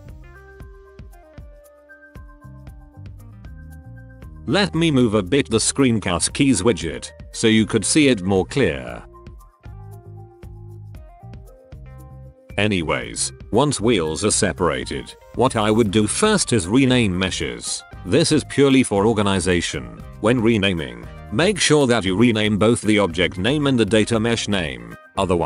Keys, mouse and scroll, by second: 1.2 p, 1.8-2.2 drag, 3.4 p, 4.7 n, 5.6 click, 8.2 click, 9.6 click, 9.7 click, 10.6 l, 11.6 p, 11.9 middle drag, 12.1 Tab, 12.1 middle drag, 12.5-13.2 middle drag, 13.4 click, 13.6 middle drag, 14.0 click, 14.4 click, 15.7 click, 16.2-18.3 drag, 18.9 ctrl+c, 20.8 ctrl+v, 22.1 click, 22.8-23.3 middle drag, 23.7 drag, 24.0 middle drag, 24.4 ctrl+KP_1.